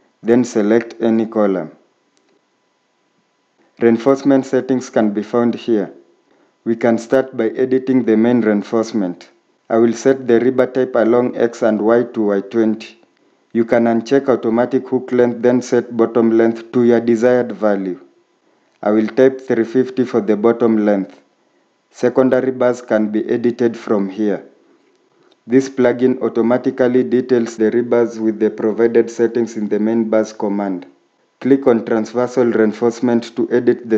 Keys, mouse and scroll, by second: 17.3 typing, 18.6 typing.